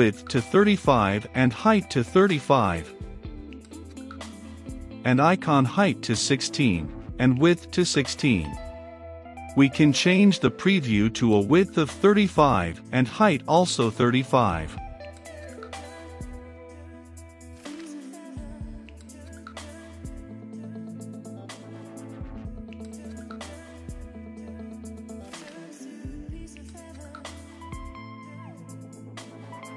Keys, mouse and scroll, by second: 2.7-5.2 middle drag, 5.2-8.7 drag, 9.7-13.6 drag, 13.6 middle click, 14.6-29.0 drag, 29.0-29.7 middle drag.